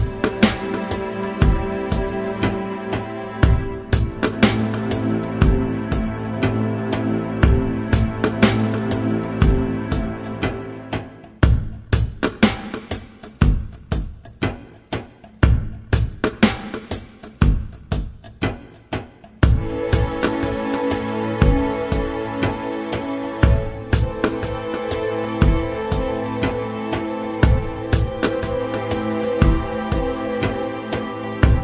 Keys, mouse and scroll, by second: 0.0 Down, 4.9 Down, 8.9 Up, 10.4 space, 11.3 space, 12.0 space, 13.0 space, 15.8 space, 16.7 space, 20.5 Tab, 23.4 Return, 31.0 Up.